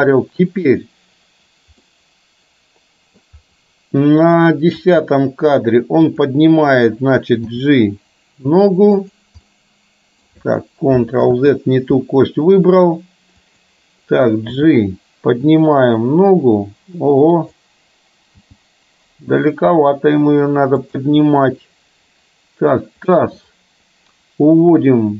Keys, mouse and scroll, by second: 1.9-3.1 middle drag, 4.9 click, 9.4 g, 9.5-10.4 middle drag, 11.3 ctrl+z, 13.5 click, 14.6 g, 18.4 g.